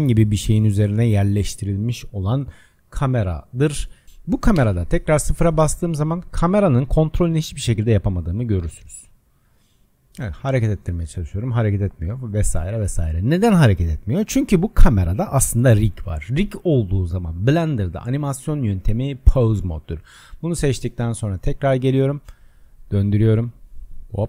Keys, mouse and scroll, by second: 4.1 click, 4.6 KP_0, 6.3-8.4 middle drag, 8.4 click, 10.1 click, 11.7 click, 12.4-13.9 drag, 14.7 click, 17.1-20.2 drag, 21.2-22.9 drag.